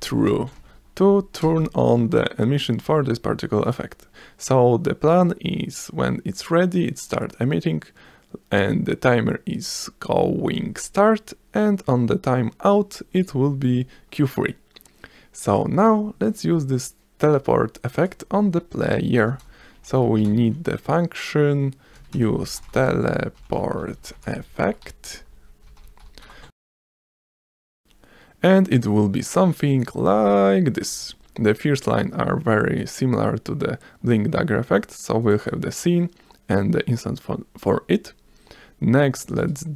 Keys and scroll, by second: 0.0-1.5 typing, 3.7 s, 18.0 s, 18.8 Return, 19.2-25.6 typing, 26.3 Return, 31.8 s.